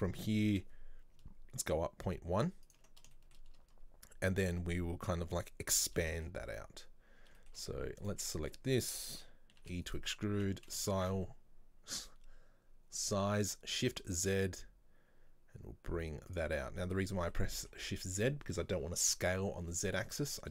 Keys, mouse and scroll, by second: 0.6 e, 3.2-8.1 shift+middle drag, 8.1 alt+right click, 8.4-9.7 middle drag, 9.7 e, 16.6-20.5 middle drag.